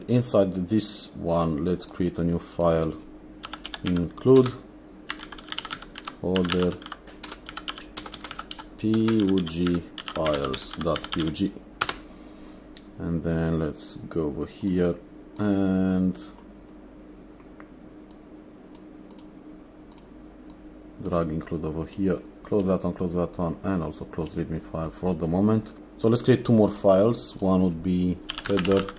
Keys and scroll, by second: 3.4-11.7 typing, 11.8 Return, 28.1-28.9 typing.